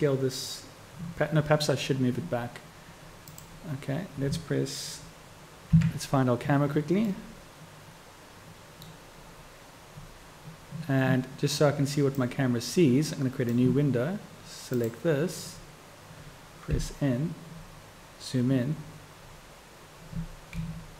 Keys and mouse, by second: 5.8 KP_Decimal, 7.9-20.6 drag, 20.6 KP_1.